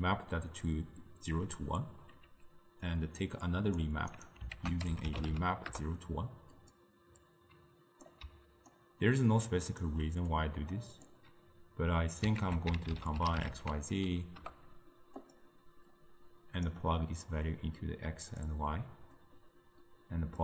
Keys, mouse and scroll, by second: 1.5 d, 2.0 d, 2.1 d, 2.9-4.4 drag, 4.6 ctrl+a, 7.3 drag, 8.3 d, 8.8-9.9 right drag, 9.9 d, 10.0 d, 10.4 click, 12.5 ctrl+a, 16.0 drag, 17.4-19.3 drag.